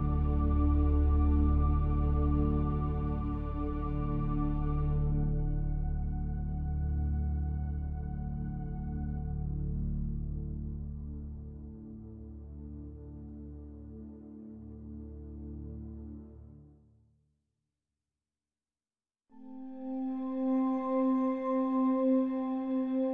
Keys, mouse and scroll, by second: 1.2 e, 4.1 s, 6.7 e, 13.8 ctrl+b, 22.1-23.1 drag.